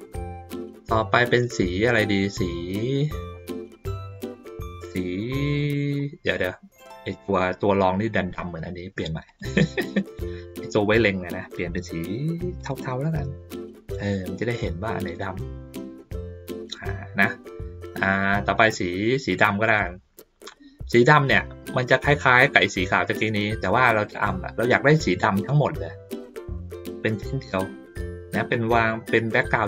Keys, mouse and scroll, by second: 0.7-1.8 ctrl+middle drag, 2.3-3.3 ctrl+middle drag, 5.2 middle click, 6.7 click, 9.2 click, 10.0 click, 12.6 click, 16.6 click, 18.2 middle click, 19.6 click, 20.5-21.8 drag, 22.2 middle click, 23.7 ctrl+scroll up 2, 24.3 ctrl+scroll up 2, 24.6 middle click.